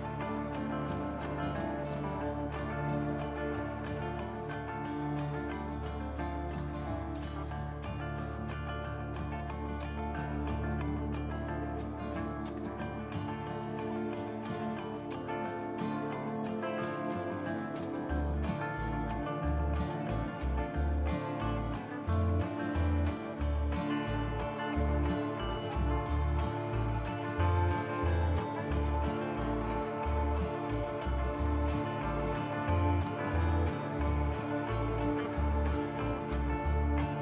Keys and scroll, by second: 0.5 F3, 1.7 f, 5.9 F3, 8.8 F3, 11.2 f, 18.5 F3, 19.4 F3, 21.6 f, 22.5 e, 24.7 f, 26.5 F3, 27.3 F3, 29.5 f, 35.0 f, 35.5 t.